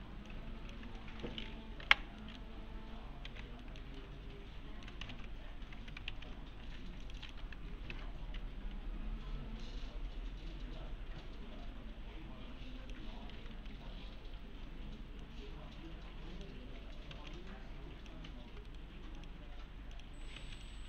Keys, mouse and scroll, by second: 0.3-0.9 click, 1.0 alt+middle click, 3.3 alt+x, 3.6 middle click, 4.0-4.9 alt+middle click, 5.1 ctrl+z, 6.1 ctrl+z, 6.6 2, 7.0 click, 8.4 1, 9.6-13.1 click, 12.7-14.0 typing, 15.2-16.5 middle click, 17.1 alt+z, 17.4-18.3 alt+click, 18.7 right click, 19.2 click, 20.4 alt+z, 20.6-20.8 alt+click.